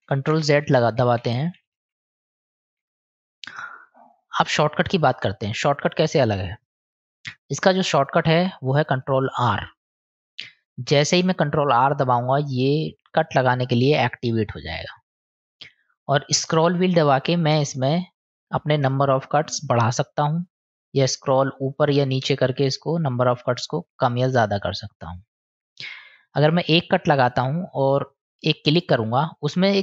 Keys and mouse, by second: 0.0 ctrl+z, 0.6 ctrl+z, 0.8 ctrl+z, 1.2 ctrl+z, 1.4 ctrl+z, 1.6 ctrl+z, 1.8 ctrl+z, 1.9 ctrl+z, 2.1 ctrl+z, 2.3 ctrl+z, 2.5 ctrl+z, 2.8 ctrl+z, 4.0-4.5 drag, 5.6-6.3 drag, 9.8 ctrl+r.